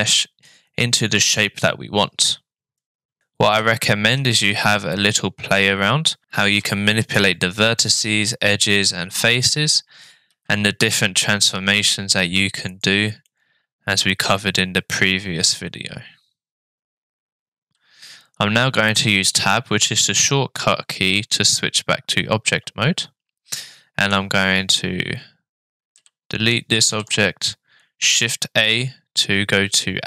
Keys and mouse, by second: 3.2 g, 3.6 g, 10.3 s, 13.3-16.8 middle drag, 22.4 Tab, 23.6-24.1 middle drag, 26.0 Delete, 26.9 shift+a.